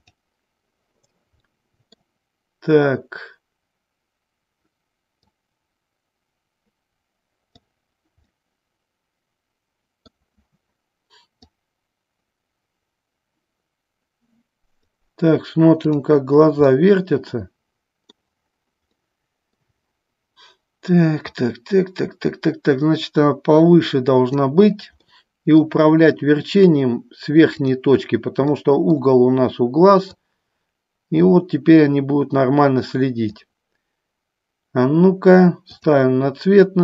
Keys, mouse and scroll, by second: 0.2 click, 1.7 middle click, 5.5-7.7 drag, 8.5-10.2 middle drag, 11.6-15.1 drag, 16.0 click, 16.8-18.2 middle drag, 19.1 middle click, 21.4-24.4 drag, 25.2 middle click, 27.7 click, 28.7 middle click, 30.4-33.4 drag, 36.3 click.